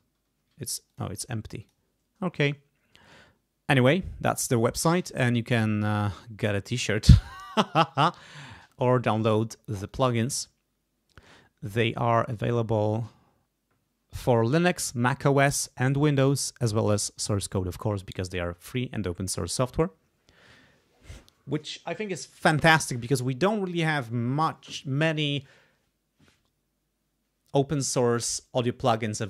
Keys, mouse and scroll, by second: 0.0 0, 0.8 click, 1.6 click, 9.8 click.